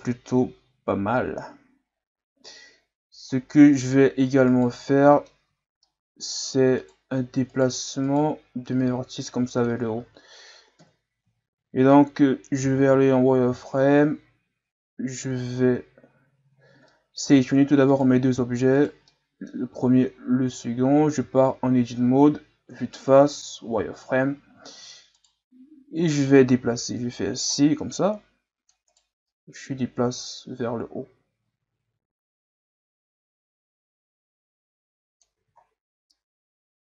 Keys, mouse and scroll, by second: 0.8 scroll up 1, 3.4-4.1 shift+scroll up 3, 4.1-4.5 scroll up 1, 4.5 right click, 4.9-5.4 middle drag, 5.4 Tab, 5.8 middle click, 6.8 right click, 7.5 right click, 8.0 right click, 8.8-10.0 drag, 10.0 ctrl+z, 10.8 KP_1, 12.7 z, 13.0-14.0 ctrl+scroll up 4, 16.0 z, 16.6 scroll down 2, 16.9 middle click, 17.2 Tab, 17.9 right click, 18.8 right click, 19.1-20.5 middle drag, 20.5 shift+right click, 21.2 Tab, 22.7 KP_1, 23.7 z, 24.2-25.1 scroll up 3, 25.1 right click, 26.6 c, 29.3-32.3 drag, 35.4 z, 35.6-36.1 scroll down 1, 36.1-36.9 middle drag.